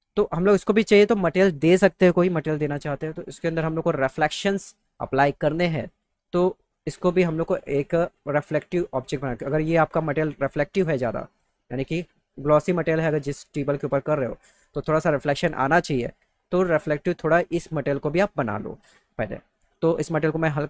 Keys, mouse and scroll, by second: 19.6 click.